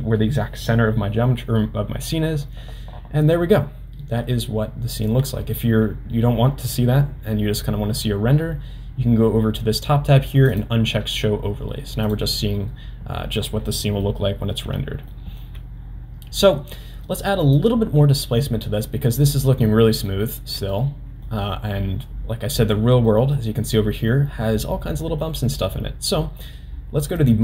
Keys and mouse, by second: 10.5 click, 12.1-14.0 drag, 14.0-14.5 middle drag, 15.1 shift+middle drag, 16.8 middle drag, 19.2 middle drag, 20.2-20.5 shift+middle drag, 20.7-21.2 middle drag, 23.1-23.4 middle drag, 23.7 middle click, 25.1 middle click, 27.2 click.